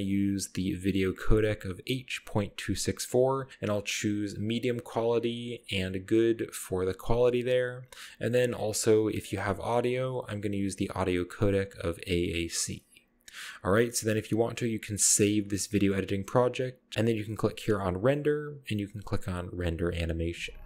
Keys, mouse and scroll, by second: 2.4-3.2 scroll down 1, 7.6-8.3 scroll down 1, 11.6 middle click, 12.1 middle click, 13.0-14.0 scroll up 1, 15.7 middle click, 18.0 click.